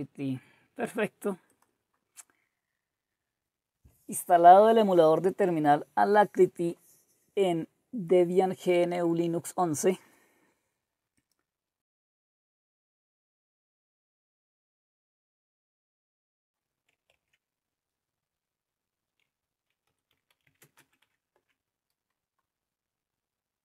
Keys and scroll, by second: 17.1 alt+Tab, 19.6-21.5 typing.